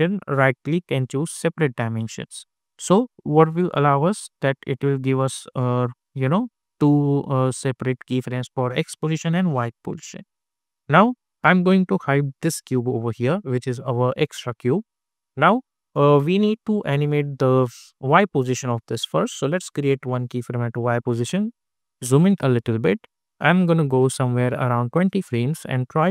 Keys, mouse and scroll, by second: 0.3 right click, 1.3 click, 8.0 click, 12.3 click, 17.9 click, 20.2 click, 21.4-23.1 typing, 23.9-26.1 drag.